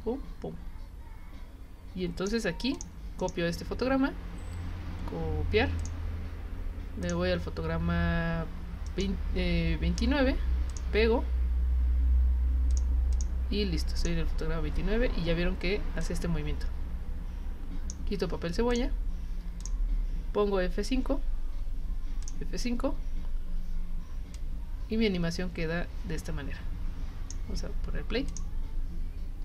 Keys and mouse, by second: 2.7 click, 5.8 click, 7.0 click, 10.7 click, 12.7 click, 13.1 click, 13.9 click, 16.0-17.9 drag, 18.7 click, 19.6 click, 21.6 F5, 22.2 click, 24.4-27.3 drag, 28.3 click.